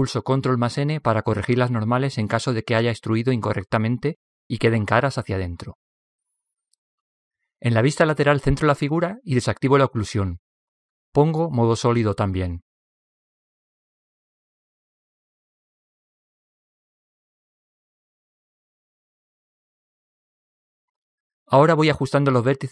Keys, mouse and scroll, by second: 0.0 middle click, 1.4 a, 1.7 a, 3.4 ctrl+n, 5.4 KP_3, 7.3-9.2 drag, 13.0-16.5 drag, 16.5 middle click, 16.5 click, 18.4 middle click, 19.2-20.4 middle drag, 20.2 a, 21.7 b.